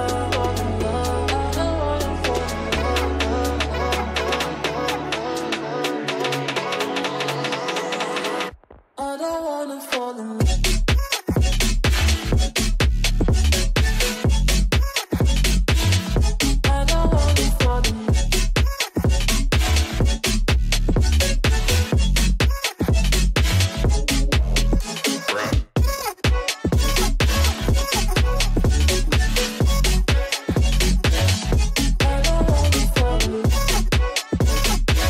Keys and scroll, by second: 9.4 Escape, 12.7 r, 13.0 Escape, 13.8 shift+Page_Up, 14.4 Escape, 23.5 Escape, 23.9 F2, 27.1 5, 27.2 0, 28.2 shift+5, 28.7 Return, 29.5 shift+o, 29.7 shift+f, 30.3 ctrl+space, 33.4 ctrl+k.